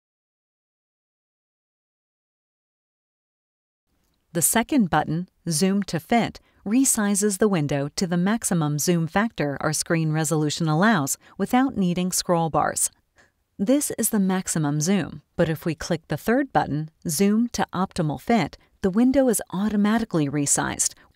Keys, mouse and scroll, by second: 0.5 middle click, 0.5-1.1 scroll down 1, 1.9 click, 6.5 click, 20.0 click.